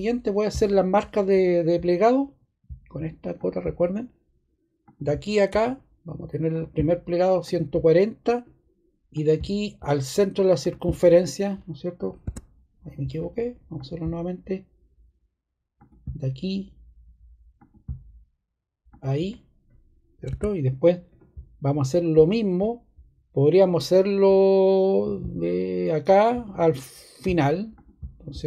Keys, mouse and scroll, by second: 12.2 ↻.